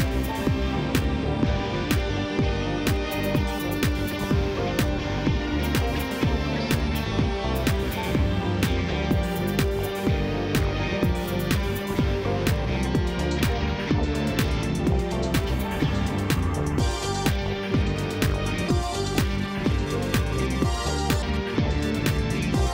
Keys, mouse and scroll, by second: 0.3-0.6 scroll down 8, 0.6-2.0 middle drag, 2.0 KP_1, 2.5-3.6 shift+middle drag, 3.6 drag, 3.8-5.4 drag, 5.6 click, 5.8 click, 6.0 click, 6.3 click, 6.7 Tab, 6.9 click, 7.1 scroll up 1, 7.3-8.7 shift+middle drag, 8.7 click, 9.6 click, 10.3 i, 11.8 i, 12.8 g, 14.7 KP_1, 15.4-16.4 scroll up 3, 15.6 shift+middle click, 16.4 ctrl+r, 18.0 ctrl+r, 19.3 ctrl+z, 20.2 ctrl+r.